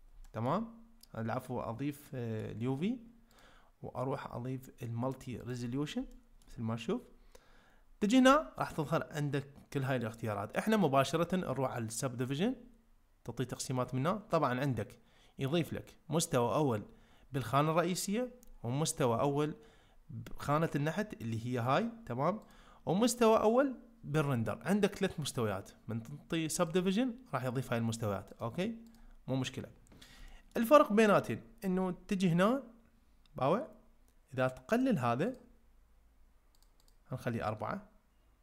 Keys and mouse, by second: 0.2 ctrl+middle click, 2.1 middle click, 3.5-5.5 drag, 6.1 ctrl+middle click, 12.4-21.6 drag, 26.6 click, 28.5 click, 30.3 ctrl+middle click, 34.8-36.7 drag.